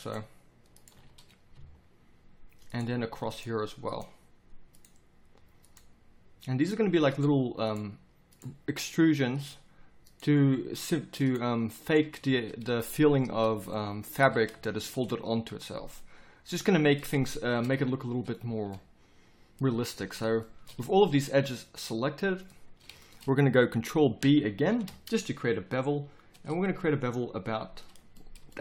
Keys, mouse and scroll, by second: 14.2 z, 18.4 z, 19.9 z, 20.8 z, 24.6 ctrl+b.